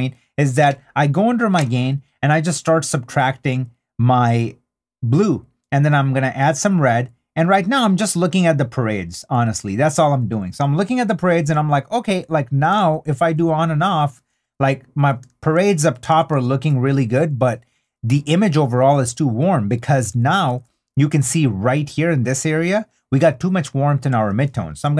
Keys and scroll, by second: 13.5 super+d, 15.3 super+d, 21.5 super+d.